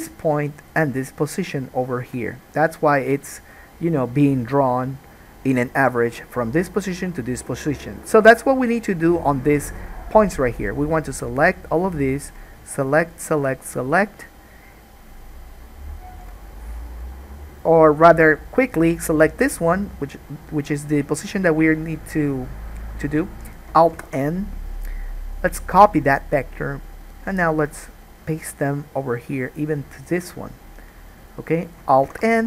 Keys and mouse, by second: 0.9 shift+click, 1.0-11.8 shift+middle drag, 11.8 click, 12.6-13.6 shift+middle drag, 13.6 shift+click, 13.7-17.7 shift+middle drag, 17.7-19.2 drag, 19.2-23.8 middle drag, 24.1 alt+n, 27.3 click, 28.0 shift+click, 29.3 shift+click, 32.2 alt+n, 32.3-32.4 alt+middle drag.